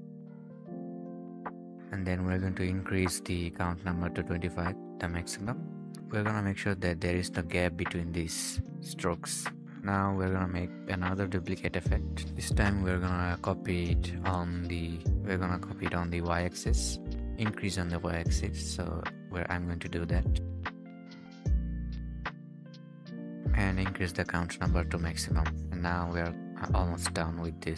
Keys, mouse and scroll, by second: 3.2-4.5 scroll down 1, 6.0-9.5 scroll up 1, 9.5 right click, 12.6 click, 13.0-14.1 scroll down 1, 17.0 typing, 18.0-20.7 scroll down 1, 20.8-22.8 scroll up 1, 22.8-23.2 scroll down 1, 23.2 ctrl+s, 25.2-26.1 scroll down 1.